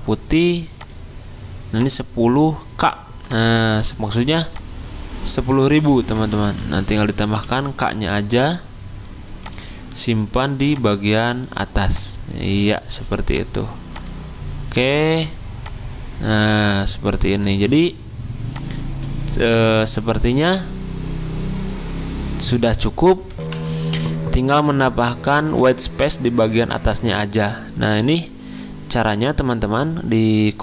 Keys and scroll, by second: 5.7 t, 6.4 ctrl+a, 7.3 k, 24.8 F10.